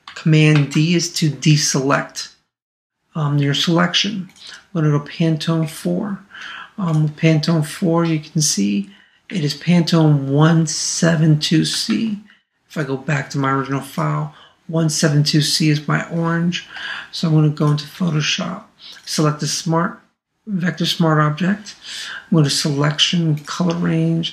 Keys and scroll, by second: 0.5 super+d, 11.9 super+Tab, 16.8 super+Tab.